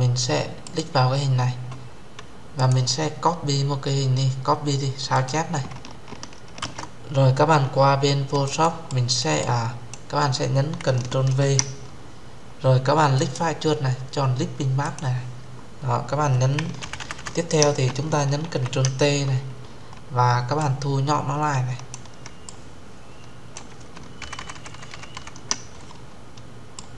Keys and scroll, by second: 6.3 alt+Tab, 11.2 ctrl+v, 18.2 ctrl+t.